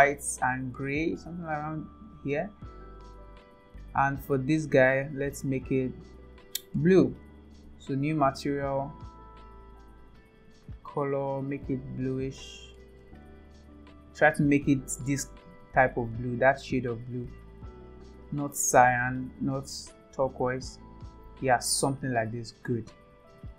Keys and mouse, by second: 4.8 click, 6.5 click, 10.7 click, 16.7 click.